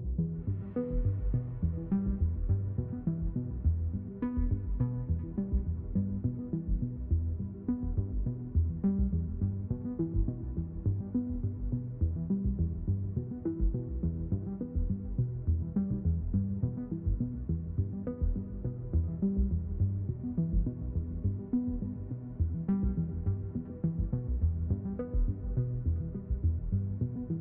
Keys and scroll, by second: 2.6 [, 3.1 d, 3.3 s, 3.4 d, 15.9 space, 20.6 d.